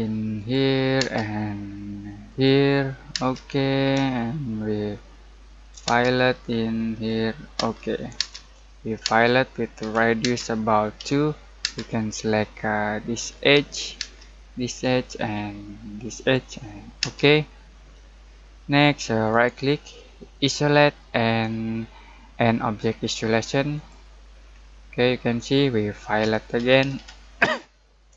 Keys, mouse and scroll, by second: 0.3 click, 1.0 space, 2.2 click, 2.7-3.1 scroll down 1, 3.1 space, 3.6-4.1 scroll down 1, 4.1-5.8 middle drag, 5.8 space, 6.1-6.9 scroll up 1, 6.9 click, 7.5 space, 9.8 r, 10.2 space, 10.9 2, 11.6 space, 12.2-12.6 scroll up 1, 13.3 click, 14.0 space, 14.6 click, 17.0 space, 17.5-17.9 scroll down 1, 17.9-19.3 middle drag, 19.3 right click, 20.3 click, 23.7 click, 24.6-24.9 scroll down 1, 24.9 middle click, 25.9-27.4 typing.